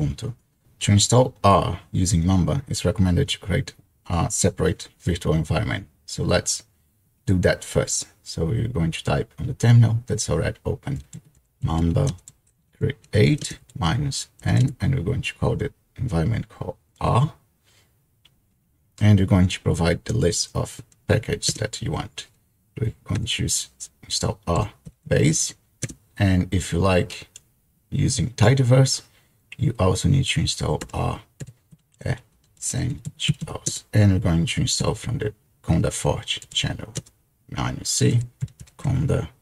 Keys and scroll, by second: 10.7-15.1 typing, 21.5 space, 23.2 typing, 24.3-25.9 typing, 30.8-33.9 typing, 36.4-37.0 typing, 38.4-39.4 typing.